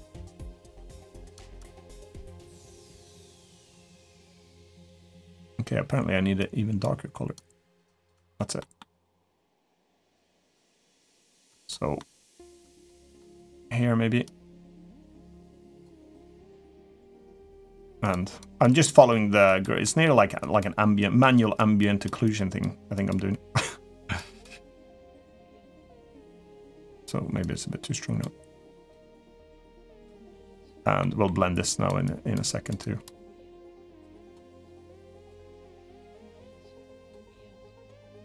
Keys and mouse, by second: 0.5 click, 0.9 click, 1.1 click, 1.3 click, 1.7 click, 2.1 click, 2.5 click, 2.8 click, 3.4 click, 4.9 click, 7.1 click, 7.6 click, 7.9 click, 8.3 middle click, 8.8 click, 9.2 click, 9.6 middle click, 10.1 click, 10.4 click, 10.9 middle click, 11.2 click, 11.7 middle click, 12.4 click, 12.7 click, 14.0 click, 14.6 click, 15.1 click, 15.5 click, 15.7 middle click, 16.7 middle click, 17.2 click, 17.8 click, 18.1 click, 18.6 middle click, 19.2 click, 19.6 middle click, 20.1 click, 20.7 click, 21.1 click, 21.5 click, 22.0 click, 22.7 click, 23.9 click, 24.4 click, 24.8 click, 25.3 click, 25.7 middle click, 27.2 click, 28.4 click, 29.0 click, 30.0 click, 30.8 middle click, 31.4 click, 31.8 click, 32.6 click, 33.0 middle click, 33.5 click, 34.0 click, 34.2 middle click, 34.9 click, 35.4 middle click, 35.9 click, 36.2 click, 36.8 click, 37.1 shift+middle click, 37.4 shift+middle click, 37.8 click, 38.1 click.